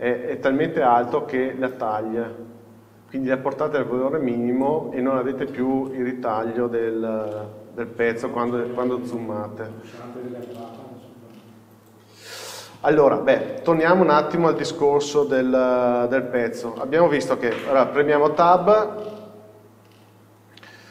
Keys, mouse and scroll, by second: 5.2-6.0 scroll up 1, 6.0-6.9 shift+middle drag, 6.9 n, 7.4 middle click, 8.4-8.8 scroll up 1, 8.8-9.2 scroll down 1, 9.2 shift+middle click, 10.1 scroll down 1, 12.8 scroll up 1, 13.8 click, 15.8 shift+h, 16.9 middle click.